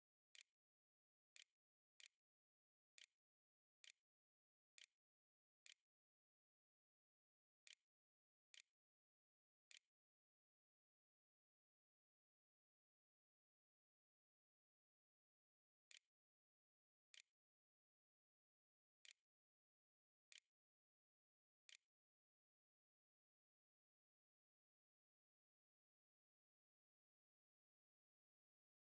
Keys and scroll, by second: 0.0-0.5 typing, 1.8-13.6 typing, 16.2 ctrl+x, 16.4 ctrl+c, 16.9 ctrl+v, 17.4-18.2 typing, 19.3 shift+Return, 19.4 shift+', 19.8 shift+[, 20.6 ], 20.7 ', 20.7 Return, 21.5 Return, 21.8-23.2 typing.